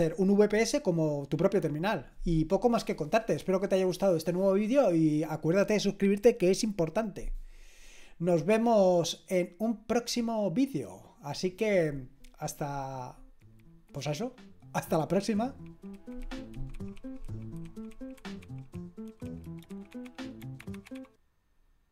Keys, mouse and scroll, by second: 10.7 click.